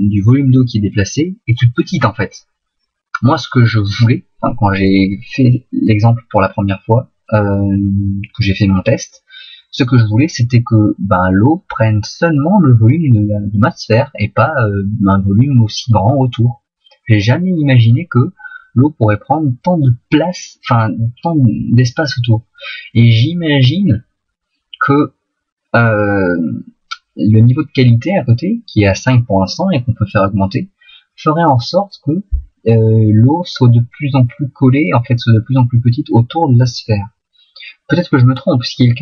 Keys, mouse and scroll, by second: 9.8 middle click, 23.4 middle click, 30.4 middle click.